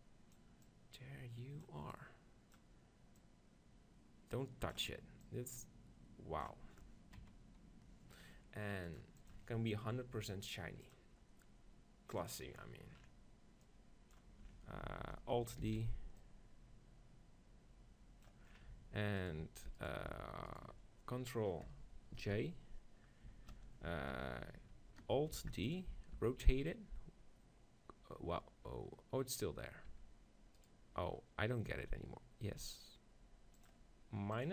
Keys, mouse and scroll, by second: 3.3-7.2 drag, 7.2 KP_3, 9.4-13.1 drag, 13.7-15.6 drag, 15.7 alt+d, 15.9-18.3 drag, 16.3-17.6 right drag, 18.5-22.2 middle drag, 22.2 ctrl+shift+j, 25.4 alt+d, 25.8-27.6 drag, 26.2 r, 29.4-32.5 right drag, 29.9 r, 31.8 r, 33.7-34.5 drag.